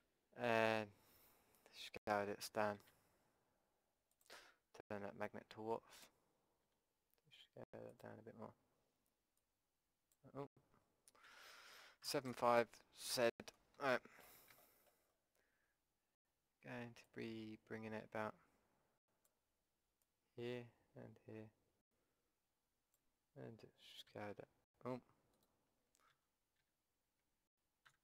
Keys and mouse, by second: 0.1 middle click, 2.9 s, 6.0-8.0 drag, 6.7 s, 9.4 click, 11.3 ctrl+z, 12.0 KP_7, 12.3 KP_5, 13.2 z, 17.1-19.1 drag, 20.0-22.1 drag, 24.1 a, 25.4-27.4 drag, 26.1 ctrl+z, 26.7 z, 27.9 a.